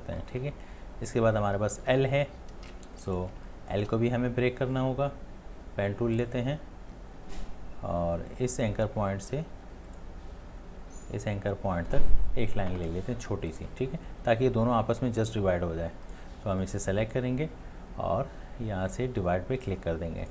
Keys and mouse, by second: 2.8 space, 3.7 click, 3.8 space.